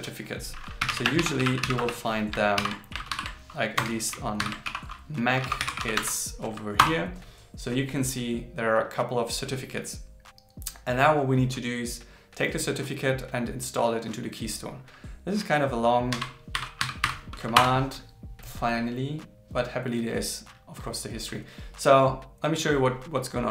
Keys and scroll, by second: 2.6 alt+n, 3.1 shift+7, 4.4 shift+7, 16.1 shift+1.